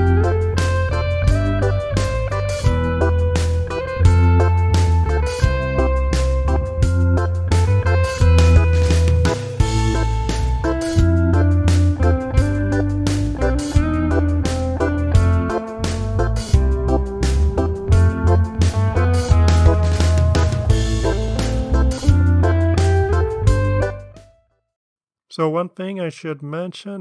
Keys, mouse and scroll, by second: 0.9 click, 3.7 click, 6.3 click, 7.0 click, 8.2 click, 8.7-9.9 drag, 10.3 click, 10.8-11.7 drag, 11.9 ctrl+d, 11.9 ctrl+click, 12.3 click, 12.4 ctrl+d, 12.5 ctrl+click, 12.8 drag, 12.9 click, 13.2 click, 13.3 shift+click, 13.5 ctrl+d, 13.6 ctrl+click, 14.1 click, 14.2 click, 14.4 ctrl+d, 14.4 ctrl+click, 14.8 ctrl+d, 15.0 click, 15.2 ctrl+d, 15.3 click, 15.7 shift+click, 15.8 shift+click, 15.9 shift+click, 16.1 ctrl+d, 16.2 ctrl+click, 16.6 click, 16.8 ctrl+d, 16.8 ctrl+drag, 17.1 click, 17.2 click, 17.4 ctrl+d, 17.4 ctrl+click, 17.8 Delete, 17.9 click, 18.0 ctrl+d, 18.2 click, 18.5 ctrl+d, 18.5 ctrl+click, 18.8 ctrl+d, 18.8 drag, 19.1 click, 19.3 shift+click, 19.5 shift+drag, 19.6 shift+click, 19.7 ctrl+d, 19.8 ctrl+click, 20.2 click, 20.7 ctrl+d, 20.8 ctrl+click, 21.1 drag, 21.3 ctrl+d, 21.4 ctrl+click, 21.6 drag, 22.0 click, 22.1 click, 22.3 click, 23.2 Delete, 25.5-26.6 ctrl+scroll up 6.